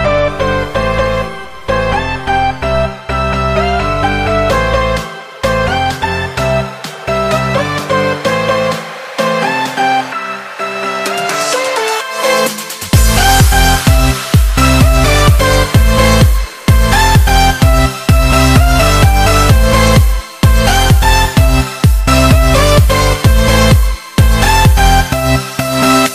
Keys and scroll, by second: 2.9 super+-, 3.1 super+-.